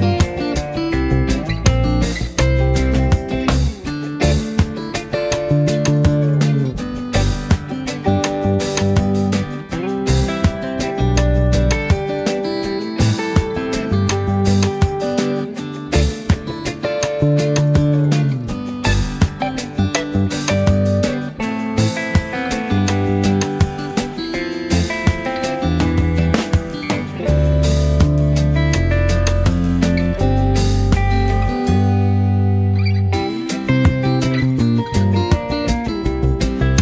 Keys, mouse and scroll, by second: 0.0 space, 0.2 click, 2.1 z, 2.4 click, 2.6 space, 2.7 click, 7.9 click, 12.4 z, 12.6 click, 12.9 space, 13.6 v, 14.9-17.7 alt+shift+drag, 18.1 space, 18.3 click, 18.5 z, 18.7 click, 18.8 space, 19.0 click, 19.3 v, 19.7 click, 22.5 space, 22.7 click, 22.9 z, 23.1 click, 23.3 space, 23.5 click, 23.9 v, 25.3 click, 28.7 z, 29.0-30.0 click, 30.0 space, 30.1-30.9 click, 31.0 v, 31.8 click.